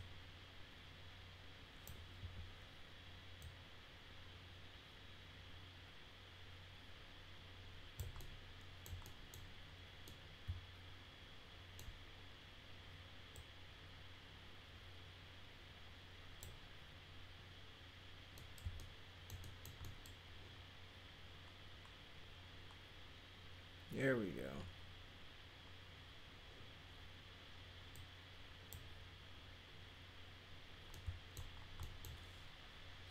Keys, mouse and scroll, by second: 3.4-7.9 drag, 8.2 alt+middle click, 9.0 middle click, 10.1-12.0 middle drag, 13.3-16.4 drag, 18.4 middle click, 18.8 alt+middle click, 19.4 middle drag, 19.8 middle click, 27.9 click, 30.9 middle click, 31.8 middle click.